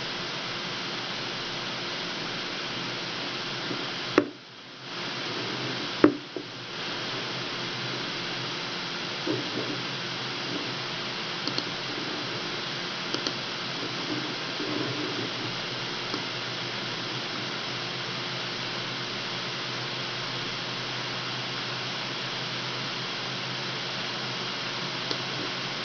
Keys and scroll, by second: 10.0 Escape.